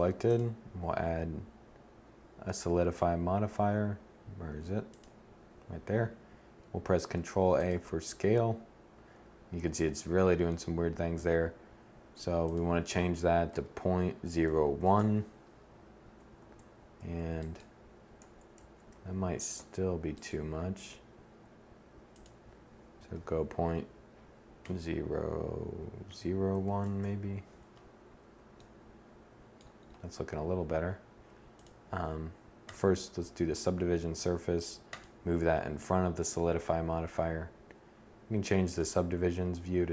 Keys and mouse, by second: 6.4 ctrl+a, 9.3 1, 15.8 Tab, 16.4 Tab, 17.6 Tab, 18.0 Tab, 18.3 a, 19.0 z, 27.6 z.